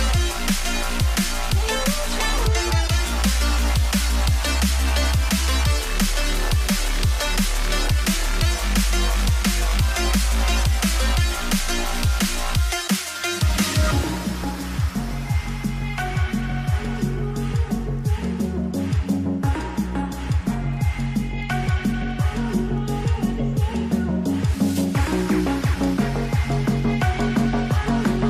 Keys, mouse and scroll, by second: 6.9 double click, 10.0 ctrl+click, 10.4 scroll down 1, 11.6-12.0 alt+scroll down 1, 13.2 shift+Up, 14.0 shift+Up, 14.2 shift+Up, 14.3 shift+Up, 14.5 shift+Up, 14.6 shift+Up, 14.7 shift+Up, 15.3 ر, 16.7 ctrl+ف, 17.4 shift+click, 18.5 Return, 19.8 alt+scroll up 1, 21.6 space, 22.3-22.9 alt+scroll down 3.